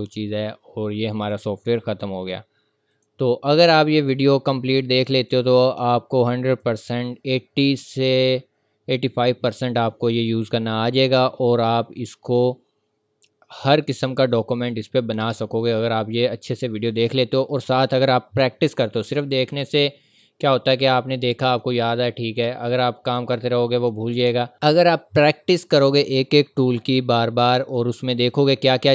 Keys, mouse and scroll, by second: 1.1 click, 3.9-5.2 scroll up 1, 5.2 click, 13.5 click, 15.2-16.3 scroll up 1, 19.0 click, 28.2 click.